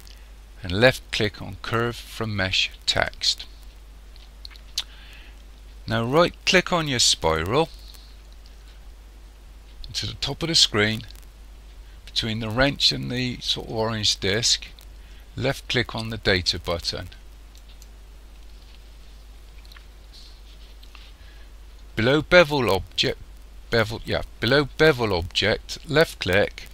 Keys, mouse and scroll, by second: 6.8 right click, 17.6 click, 26.0 click.